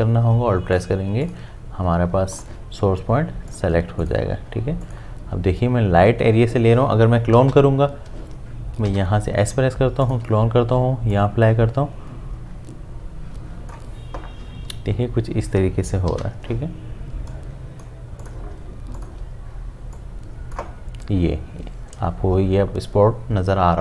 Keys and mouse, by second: 7.4 typing, 8.9 typing, 10.0-16.1 alt+drag, 16.1 typing, 17.3 click, 19.0-22.8 alt+drag.